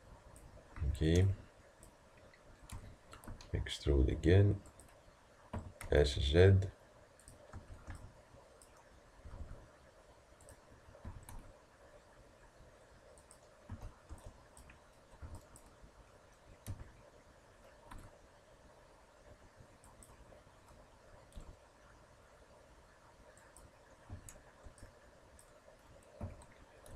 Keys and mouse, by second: 0.8 a, 7.6 a, 13.7 a, 15.2 b, 16.7 e, 24.1 a.